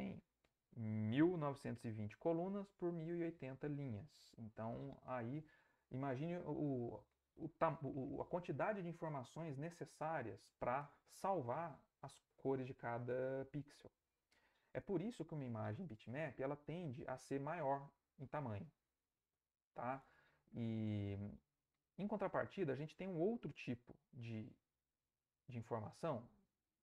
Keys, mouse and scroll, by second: 20.9-22.2 middle drag, 22.2-23.6 ctrl+middle drag, 23.9-26.5 ctrl+middle drag, 23.9 ctrl+scroll, 25.2 ctrl+scroll, 25.3-26.1 ctrl+scroll down 4, 26.1-26.5 ctrl+scroll up 1, 26.7-26.8 ctrl+middle drag, 26.7-26.8 ctrl+scroll down 5.